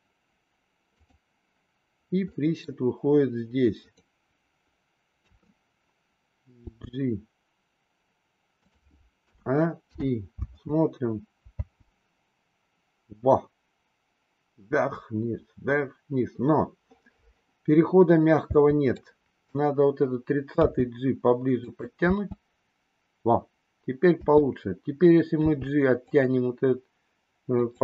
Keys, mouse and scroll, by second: 1.0 click, 2.3 middle click, 5.1 KP_3, 6.6 g, 9.3 a, 9.9 i, 10.3 space, 10.5 space, 11.6 space, 18.6 space, 18.9-19.4 drag, 20.6 g, 22.0 space, 24.3 space, 25.4 g, 27.5 click.